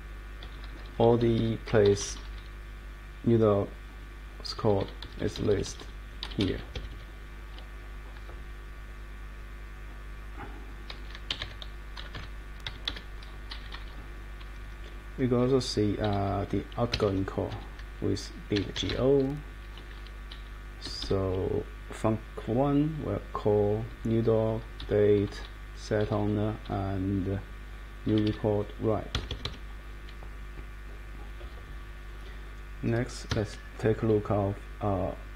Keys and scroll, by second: 0.0 Down, 4.6 Down, 4.8 Down, 5.0 Up, 5.2 Up, 5.4 Up, 5.5 Up, 5.6 Up, 6.2 Down, 6.7 Escape, 11.0-12.6 typing, 12.8 Return, 13.5 Down, 14.4 Right, 15.0 Right, 15.4 Down, 15.9 Down, 16.1 Up, 16.9 Escape, 18.3-19.4 typing, 20.3 Down, 20.6-21.3 typing, 23.9 Down, 24.8 Up, 25.1 Down, 26.0 Down, 26.6 Up, 28.1 Down, 29.1 Escape, 33.3 Escape.